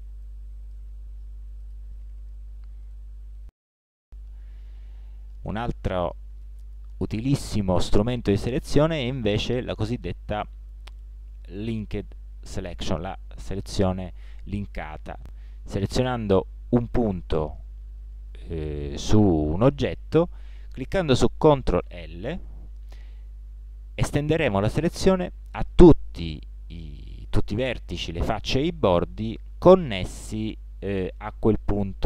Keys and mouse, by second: 6.8 middle click, 7.3 middle click, 14.7-15.6 middle drag, 16.2-17.7 right drag, 21.9 ctrl+l.